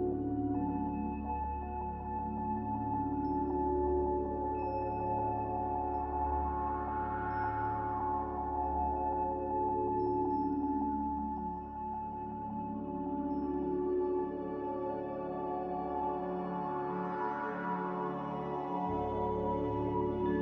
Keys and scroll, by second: 3.6 Escape, 6.6 z, 8.7 typing, 11.1 typing, 11.3 Return, 17.4 z.